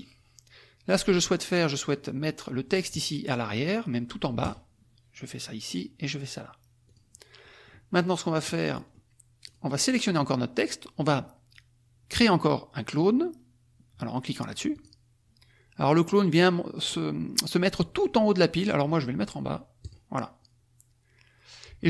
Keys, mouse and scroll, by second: 1.0 click, 4.4 click, 5.7 click, 6.8 click, 7.4 click, 8.0 click, 8.6 click, 9.4 click, 14.7 click, 19.8 click.